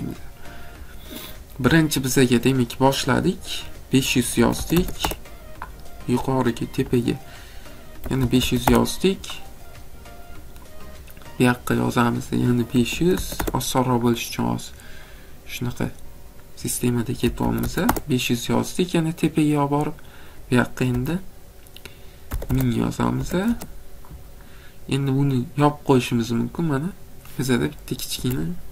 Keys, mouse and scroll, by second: 4.2-5.1 typing, 7.8-8.5 typing, 8.6 Return, 10.2 typing, 12.5-13.3 typing, 14.3 middle click, 15.0 middle click, 15.4 middle click, 17.0-17.9 typing, 20.2-20.9 typing, 22.3 0, 22.5 0, 23.2 0, 23.5 Return, 26.7 click, 28.2 Escape.